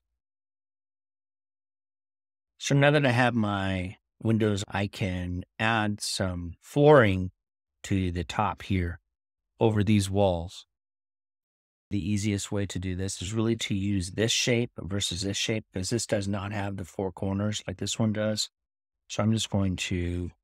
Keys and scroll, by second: 20.3-20.4 typing.